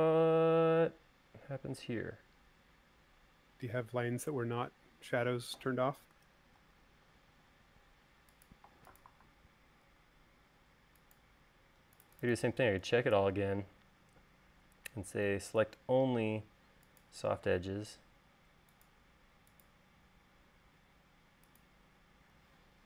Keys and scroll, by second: 7.3 super+z.